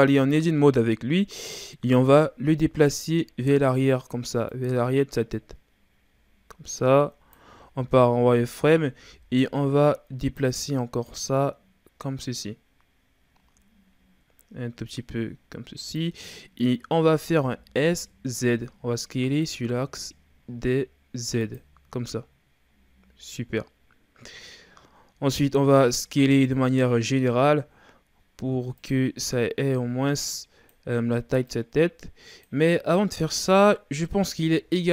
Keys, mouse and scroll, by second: 1.9 KP_3, 3.2-4.5 ctrl+scroll up 4, 4.5-7.5 drag, 7.8 z, 8.5 right click, 9.1 b, 11.0-14.1 drag, 17.3 s, 24.8-25.4 scroll down 1, 25.4 a, 25.7 a, 27.0 s, 29.7-34.1 drag, 34.1 KP_1.